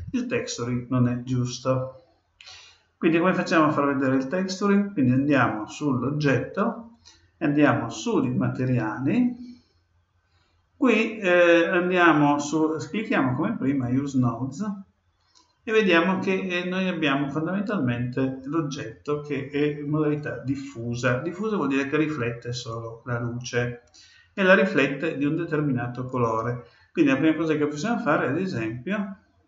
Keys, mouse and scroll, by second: 5.1-6.9 right drag, 7.0 right click, 8.0-9.8 drag, 13.6-15.4 drag.